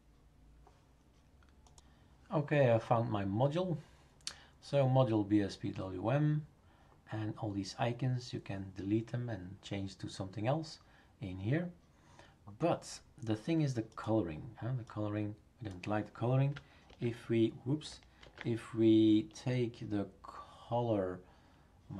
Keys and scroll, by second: 16.8 ctrl+v, 18.2 ctrl+z.